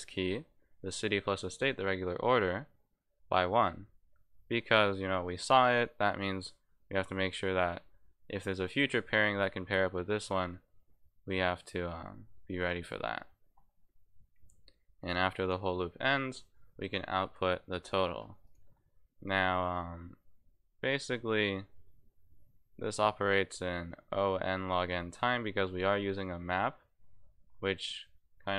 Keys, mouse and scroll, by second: 14.3-15.5 drag, 18.4 click.